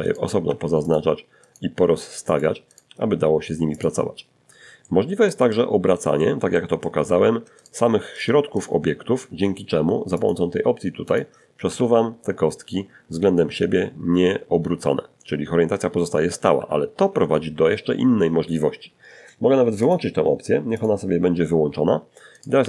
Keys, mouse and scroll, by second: 0.0 g, 0.5 click, 0.9 right click, 1.1 g, 2.0 click, 2.5 scroll down 2, 3.0-5.5 middle drag, 5.8 shift+right click, 6.4 shift+right click, 6.8 shift+right click, 8.4 click, 9.3 click, 9.9 r, 14.8 Escape, 18.0 click, 19.0 click, 20.6 right click, 20.8 g, 21.3 click, 21.7 right click, 21.8 g, 22.2 click.